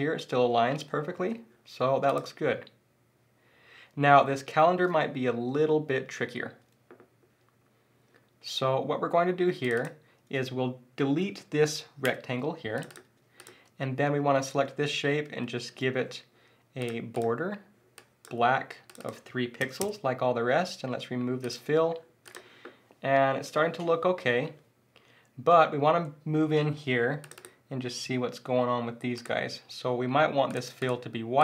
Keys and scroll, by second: 1.1 shift+super+z, 1.9 super+z.